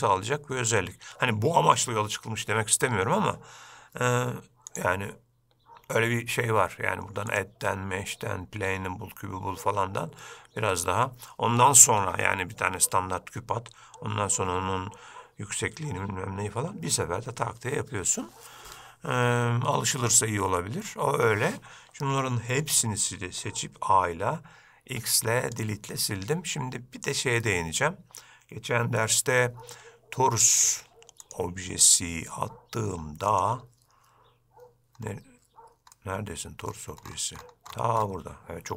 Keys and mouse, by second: 4.8 click, 7.6-9.9 drag, 22.8 a, 25.1 x, 31.6-33.6 drag, 36.1-36.9 middle drag.